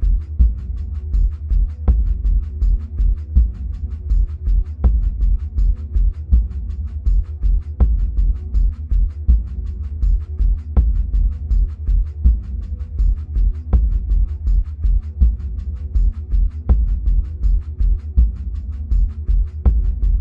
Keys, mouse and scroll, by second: 0.2 middle click, 4.9-15.0 drag, 18.4-20.2 drag.